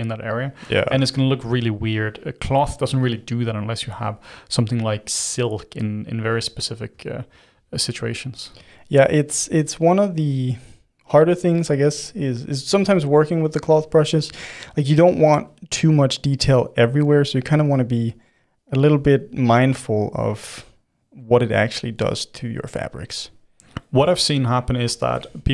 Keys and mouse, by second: 0.6-1.8 middle drag, 1.8 g, 3.9 r, 5.3 r, 6.2-9.3 middle drag, 9.3 g, 12.4 click, 13.5 click, 14.1-16.2 middle drag, 16.2-17.8 drag, 17.8 middle click, 18.3-19.4 drag, 19.4-25.5 middle drag.